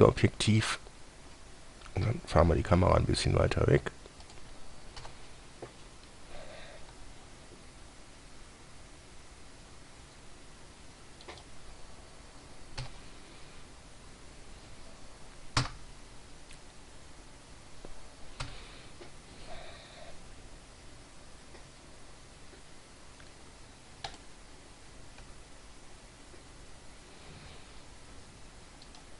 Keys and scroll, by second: 2.9 g, 5.3 1, 7.2 g, 13.1 1, 15.9 1, 18.7 7, 20.6 g, 25.5 g.